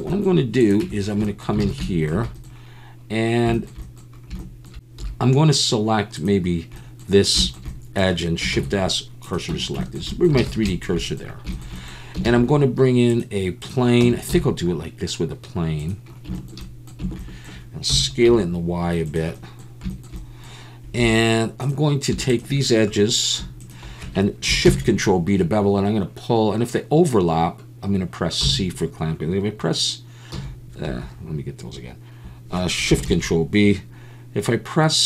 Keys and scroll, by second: 0.8 Tab, 1.6 alt+a, 5.0 2, 8.5 shift+s, 9.5 Tab, 10.4 alt+a, 12.3 shift+a, 14.0 Tab, 14.3 s, 17.9 s, 18.3 y, 21.0 2, 24.6 ctrl+shift+b, 28.4 v, 28.4 c, 30.3 c, 30.9 Escape, 33.1 ctrl+shift+b, 33.2 c.